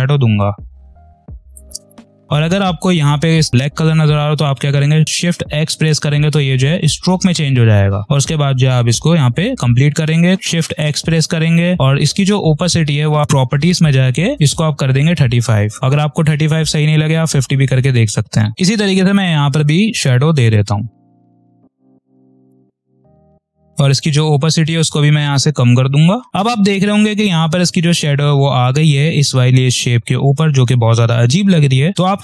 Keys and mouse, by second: 0.7 click, 0.8 space, 0.8 click, 0.9 space, 1.2 click, 5.4 shift+x, 6.7 click, 6.9 space, 7.1 click, 7.5 space, 8.0 click, 10.6 shift+x, 11.4 click, 11.6 space, 12.7 click, 15.0-15.8 typing, 15.8 click, 17.9 click, 18.3 space, 19.0 click, 20.6-22.0 typing, 20.9 click, 21.3 click, 21.3 click, 21.8 click, 21.9 click, 22.1 click, 22.7 click, 22.8 ctrl+z, 23.0 ctrl+click, 26.3 ctrl+z.